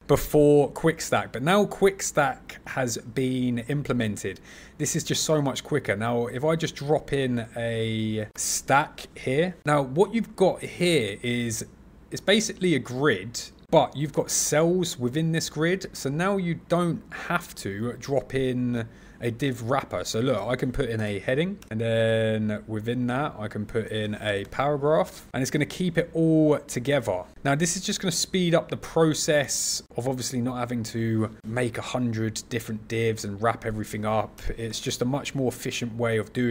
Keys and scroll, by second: 8.3 super+e, 20.3 super+e, 23.9 super+e, 29.4 super+z.